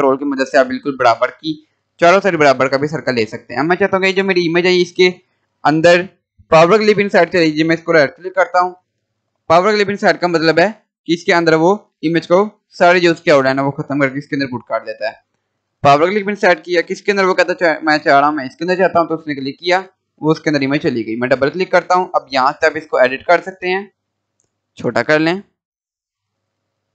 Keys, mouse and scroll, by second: 3.0 scroll down 1, 5.3 scroll up 1, 7.2 click, 7.7 right click, 15.8 click, 18.5 click, 22.0-22.6 scroll down 1, 22.7-26.9 drag, 22.7 scroll up 1.